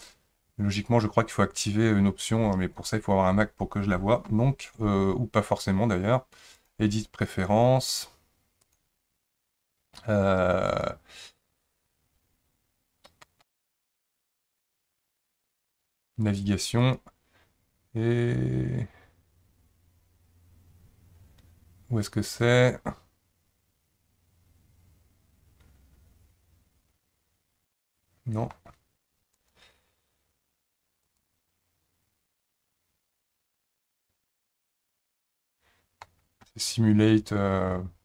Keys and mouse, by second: 6.6 click, 7.9-8.8 drag.